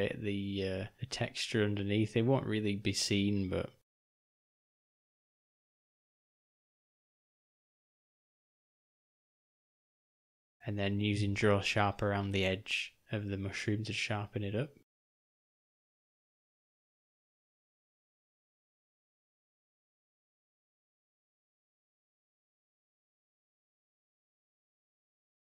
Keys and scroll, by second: 3.8 shift+/, 4.2-5.1 shift+,, 11.8 shift+., 12.7 o, 14.4 F2, 15.3 r, 16.2 o, 18.7 g, 20.8 r, 23.8 Tab, 25.2 g.